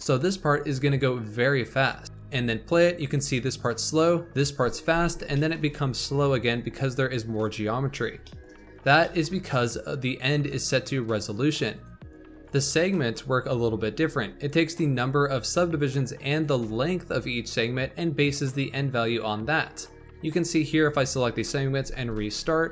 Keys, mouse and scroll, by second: 2.0 space, 4.8 space, 5.0-5.3 scroll down 2, 5.3-8.6 shift+middle drag, 8.6-8.9 scroll up 3, 8.9-11.7 shift+middle drag, 11.7-12.1 drag, 12.4-15.4 drag, 19.6-21.7 drag, 21.7 space.